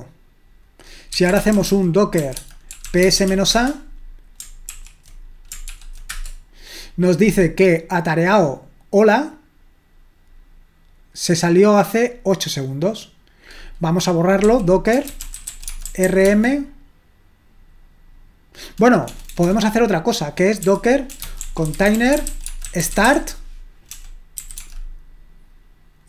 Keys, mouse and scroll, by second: 0.9-4.7 typing, 4.7 ctrl+l, 5.7 ctrl+p, 6.1 Return, 8.9-10.9 drag, 11.3-13.5 drag, 13.6 click, 14.2-16.5 typing, 19.0-19.4 typing, 20.6-24.6 typing.